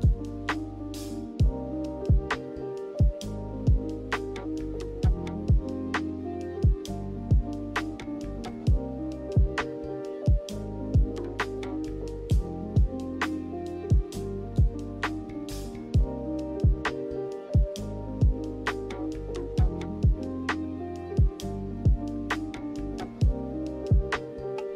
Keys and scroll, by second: 16.6-17.5 typing, 19.1 z, 20.3 Right, 20.6 Right.